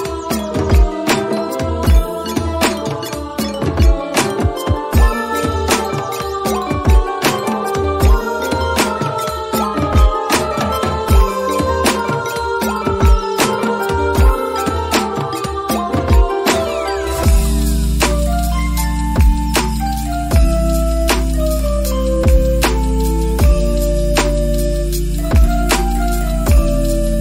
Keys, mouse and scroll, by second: 0.0-0.5 scroll down 3, 0.1 middle click, 0.6 click, 0.7 middle click, 0.9 click, 1.1 click, 2.5 middle click, 2.8 s, 3.7 middle click, 4.0 Tab, 5.0 click, 6.1 /, 6.2 middle click, 6.3 scroll up 2, 6.5 click, 7.8 middle click, 8.0 s, 9.1 click, 9.4 click, 11.0 /, 11.1-13.0 middle drag, 13.0 /, 13.2 middle click, 13.7 middle click, 14.0 Tab, 14.5 click, 14.6 alt+click, 14.7 middle click, 14.9 g, 16.1 middle click, 16.3 Tab, 16.4 middle click, 16.6 Tab, 16.8 middle click, 17.2 click, 17.6-18.6 middle drag, 18.6 click, 18.8-20.3 middle drag, 20.4 click, 20.5 right click, 21.6 click, 21.8 click, 22.1 click, 22.5 click, 22.9 click, 23.0 click, 23.2 middle click, 24.1 click, 24.4 click, 24.5 click, 24.7 right click, 24.9 click, 25.0 click, 25.2 click, 25.4 middle click, 25.6 click, 25.9 click, 26.4 click, 26.9 click, 27.1 middle click.